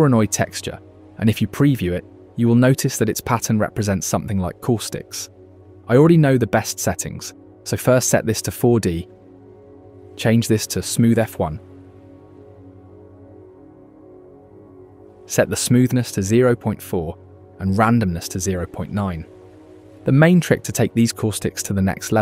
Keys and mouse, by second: 0.1 middle click, 0.7-1.0 shift+middle drag, 1.1 middle drag, 2.0 shift+middle click, 2.4-3.4 middle drag, 4.8 middle click, 5.5 click, 6.7 middle click, 9.0-10.2 drag, 10.8-12.3 drag, 13.6 middle click, 14.9-16.2 drag, 18.8-20.5 drag, 20.5-22.2 middle drag.